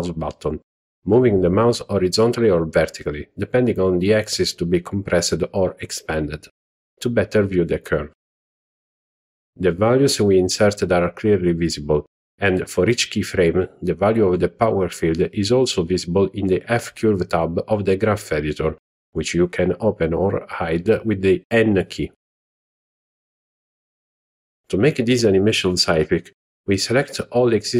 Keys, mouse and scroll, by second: 0.9-3.6 ctrl+middle drag, 6.5 click, 7.7 click, 15.4 click, 18.8 click, 20.8 click, 20.8 n, 22.6 n.